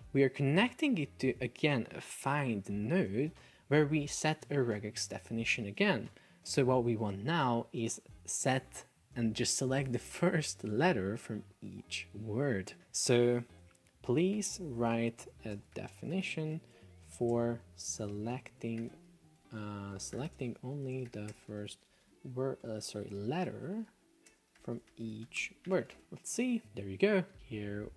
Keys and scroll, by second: 13.4 F1, 14.6 space, 15.6 space, 16.8 space, 18.0 Delete, 19.4 BackSpace, 20.0 BackSpace, 20.4 space, 21.4 space, 22.7 BackSpace, 22.9 Delete, 24.4 space.